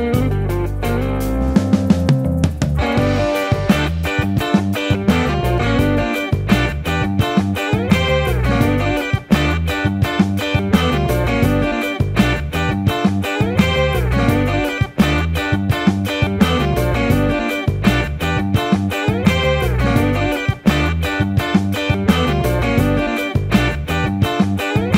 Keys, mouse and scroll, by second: 1.6 shift+d, 1.8 ctrl+z, 3.0 KP_1, 4.0 Tab, 5.6 Tab, 8.6 KP_1, 9.9 KP_7, 10.5 r, 11.8 KP_1, 13.1-15.5 typing, 15.6 Tab, 17.3 Tab, 17.6 shift+d, 19.9 alt+s, 20.6-21.7 typing, 22.2 ctrl+z, 22.5 Tab, 22.7 Tab, 23.8 Tab, 24.0 Tab, 24.1 Tab, 24.4 alt+r.